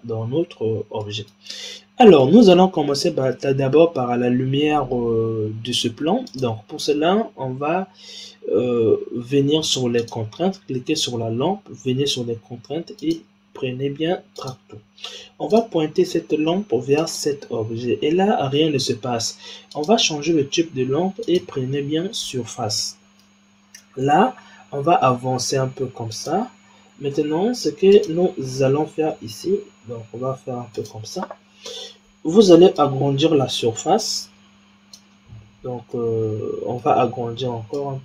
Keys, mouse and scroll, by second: 1.0 middle click, 1.8-2.1 scroll down 3, 2.1-5.2 middle drag, 6.2 click, 9.9 click, 12.9-15.5 drag, 19.6 click, 21.2 click, 22.7-24.0 middle drag, 24.0 g, 27.9 click, 29.1 g, 32.7-35.7 drag, 35.8-37.7 middle drag, 37.7-38.0 drag.